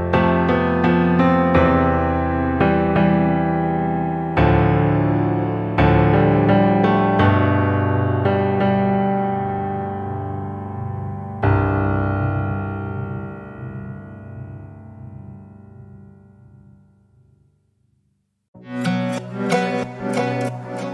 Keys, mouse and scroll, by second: 2.0 shift+middle click, 2.9 alt+z, 3.1 click, 4.0 alt+z, 4.2 middle click, 4.7 click, 6.1 Tab, 6.4-7.4 middle drag, 7.4 scroll down 2, 7.6-8.0 shift+middle drag, 8.0 scroll up 1, 8.3 Tab, 9.2 ctrl+r, 9.9 middle click, 10.5 click, 11.5 shift+middle click, 12.4 z, 13.8 click, 14.5 alt+z, 14.9 click, 16.4 shift+middle click, 17.1 scroll down 1, 17.4 shift+middle click, 17.9-19.2 scroll up 1, 19.2 shift+middle click, 19.8 scroll down 1, 19.9 middle click, 20.4-20.9 scroll up 1.